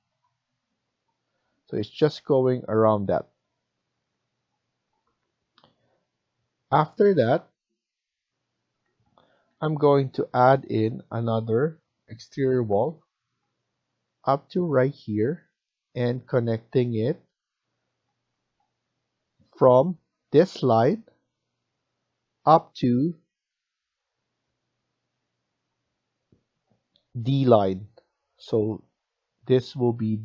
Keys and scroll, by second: 0.0 Return, 6.0 Escape, 8.6 F1, 9.5 Escape, 9.6 Escape, 15.5-16.2 typing.